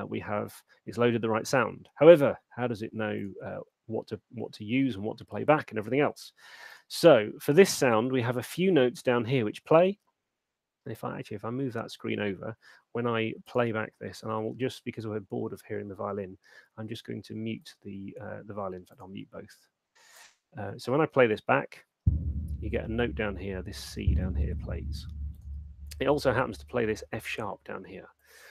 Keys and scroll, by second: 14.5 F3, 19.8 F3, 21.0 alt+shift+space, 25.6 space.